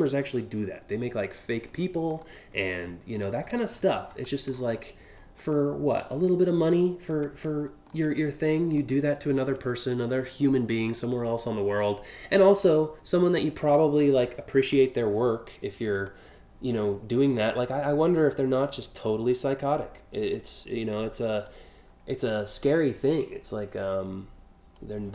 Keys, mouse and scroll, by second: 0.1 scroll down 1, 1.2-1.5 alt+scroll down 2, 1.8 alt+scroll down 1, 3.1-3.8 scroll up 3, 4.1 scroll down 1, 4.7 alt+scroll down 1, 5.8 scroll up 2, 6.2 scroll down 1, 7.1-7.6 ctrl+scroll up 2, 8.2 scroll down 1, 9.1-9.5 alt+scroll up 2, 11.0-12.9 drag, 14.1 ctrl+t, 15.5 click, 19.8 click, 21.0-24.4 drag, 25.0 scroll up 3.